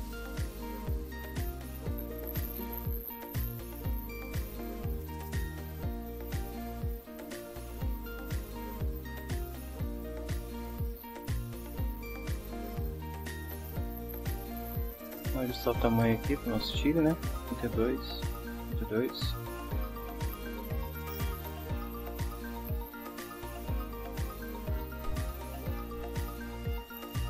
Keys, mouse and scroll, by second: 0.4-1.4 drag, 5.0 click, 6.4 click, 9.5 click, 9.8-10.2 scroll down 1, 10.6 click, 16.2 click, 17.1-19.1 typing, 18.2 click, 19.6 Return, 20.5 click, 22.6 click, 26.1 click, 27.2 click.